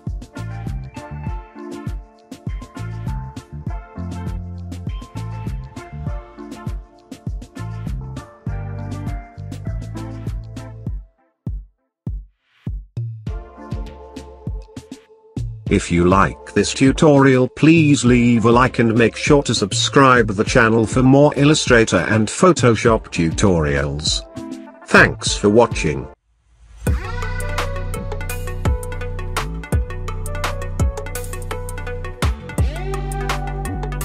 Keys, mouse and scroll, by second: 12.8 click, 15.6 ctrl+space, 15.6 click, 22.0 click.